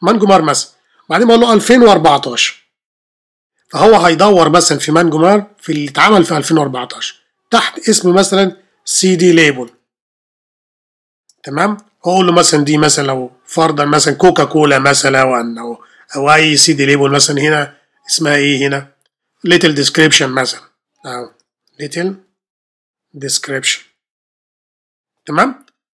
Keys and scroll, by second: 1.3-3.6 typing, 7.6-10.8 typing, 14.1-16.4 typing, 21.2-25.3 typing.